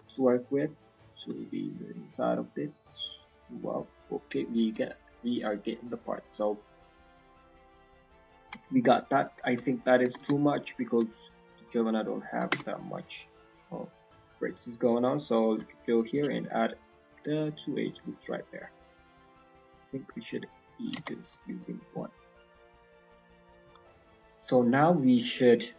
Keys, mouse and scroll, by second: 4.7-5.8 scroll down 7, 5.1 middle click, 5.7 middle click, 8.2-8.5 scroll up 4, 8.4 Tab, 9.1 alt+click, 9.6 shift+middle click, 10.0 g, 12.5 Tab, 13.2 right click, 14.8 click, 15.4-16.1 scroll down 3, 16.1-16.5 scroll down 1, 16.6 click, 17.0-17.6 scroll down 3, 17.3 middle click, 17.9 middle click, 18.2-18.5 scroll down 1, 19.6 click, 20.4 middle click, 20.7-21.1 scroll up 2, 21.4 shift+middle click, 21.7-22.2 scroll up 1, 22.2 alt+click, 23.2 middle click, 23.5 scroll up 1, 23.6 z, 23.8 middle click, 24.1 scroll up 1.